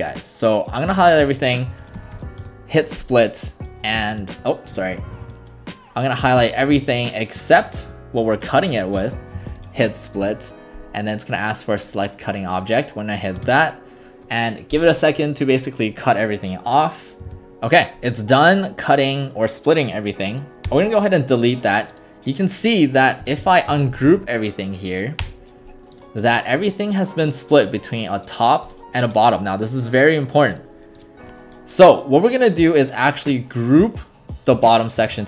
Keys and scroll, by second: 1.5-2.7 typing, 4.8 ctrl+Escape, 9.1-10.1 typing, 10.2 Return, 13.4 space, 17.3 alt+r, 20.7 Delete, 22.4-24.7 typing, 25.2 Return, 35.0 ctrl+g.